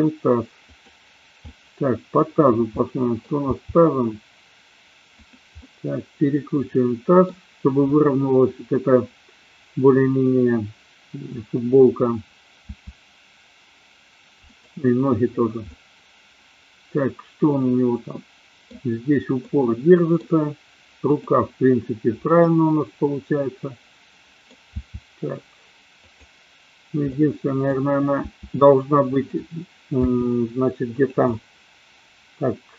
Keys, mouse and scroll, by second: 1.4 middle click, 2.8 middle click, 3.5 r, 5.7-7.3 middle drag, 12.7 r, 15.7-18.7 middle drag, 19.4 middle click, 21.0 click, 22.4-24.5 middle drag, 24.9 r, 27.2-27.8 middle drag, 28.3 r, 30.2 g, 31.3-32.7 middle drag.